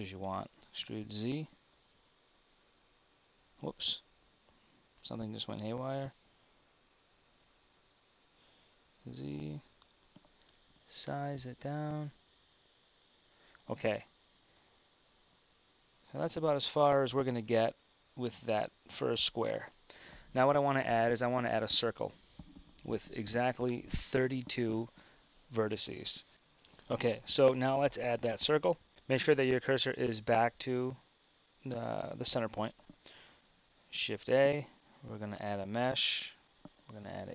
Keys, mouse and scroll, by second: 0.3 e, 6.4 g, 10.4 s, 14.4 Tab, 16.4 Tab, 17.5 z, 26.3 t, 28.7 t, 33.8 shift+a.